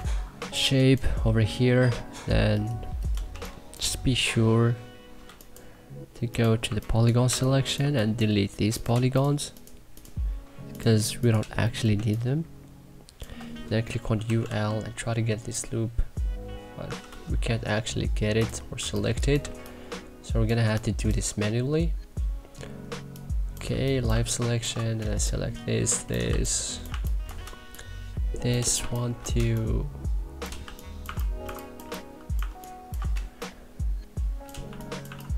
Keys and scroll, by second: 0.3 1, 3.3 3, 6.6 1, 7.2 2, 11.8 Delete, 11.9 3, 13.9-14.9 typing, 18.7 2, 19.4 3, 20.6 2, 23.6 3, 24.1 2, 26.2 3, 26.8 1, 28.8 1, 30.3-31.9 typing, 34.4-35.3 typing.